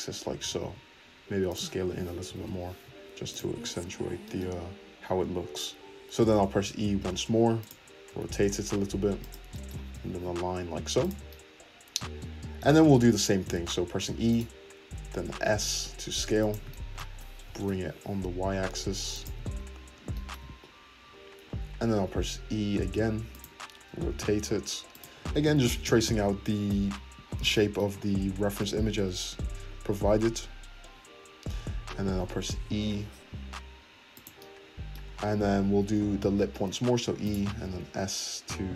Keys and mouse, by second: 0.4 s, 0.8 shift+middle click, 2.2 g, 2.9 shift+middle click, 3.5 `, 4.0 shift+middle click, 4.9-5.9 middle drag, 5.9 ctrl+z, 6.4 e, 8.1 r, 9.0 shift+middle click, 9.7-15.3 drag, 9.9 g, 14.0 e, 14.9 s, 17.4 g, 19.5 `, 20.0 shift+middle click, 20.4-25.8 middle drag, 21.8 e, 23.9 r, 26.8 `, 32.2 e, 34.3 click, 34.5 middle click, 35.1 click, 35.9-37.6 middle drag, 36.8 e, 37.6 s.